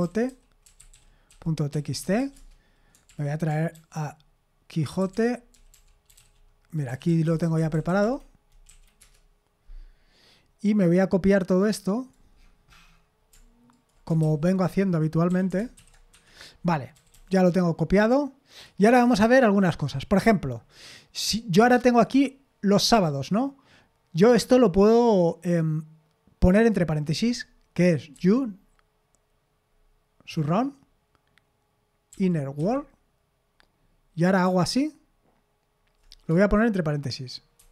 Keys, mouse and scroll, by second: 0.0-2.7 typing, 3.1 super+l, 4.6-6.6 typing, 7.1 Down, 7.2 Down, 7.4 Down, 7.6 Down, 7.7 Down, 7.9 Down, 8.0 Down, 8.7 Up, 9.0 Return, 11.7 click, 12.4-13.7 scroll down 1, 13.7 shift+click, 14.2 ctrl+c, 14.5 click, 15.3 i, 15.8 ctrl+v, 16.1 Escape, 16.9 typing, 18.5 click, 21.9 click, 28.1 typing, 30.3 typing, 32.1-32.6 typing, 37.6 shift+0.